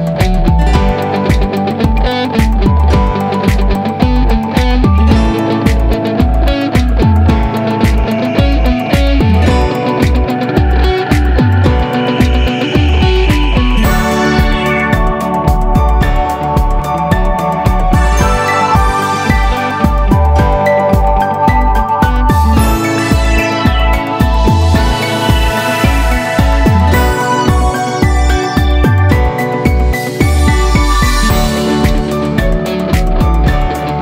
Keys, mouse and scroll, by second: 1.2 click, 2.3-3.3 drag, 4.3 click, 6.3 click, 6.7-7.3 scroll up 2, 7.3-9.2 shift+middle drag, 9.8 click, 10.3 a, 10.5 a, 10.5 a, 10.9-12.4 middle drag, 13.1 click, 17.7 click, 18.5 click, 19.5 click, 20.4 click, 20.8 click, 21.6 click, 23.0-24.5 middle drag, 24.5 click, 25.0 click, 26.0 Tab, 26.2 middle click, 27.7 right click, 28.1 click, 28.4 middle click, 28.9 g, 30.6 scroll down 2, 30.8-31.8 middle drag, 31.8 Tab, 32.0-33.5 middle drag.